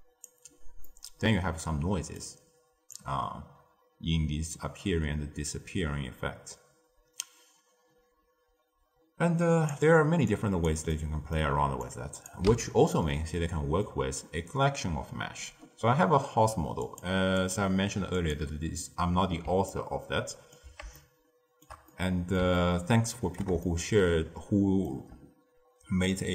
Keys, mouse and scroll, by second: 0.8-2.8 middle drag, 2.8-6.0 drag, 10.3 click, 10.8-11.8 middle drag, 11.8 click, 12.4 x, 12.8-15.8 middle drag, 16.8 click, 17.3 click, 18.7 click, 19.6-26.3 ctrl+middle drag.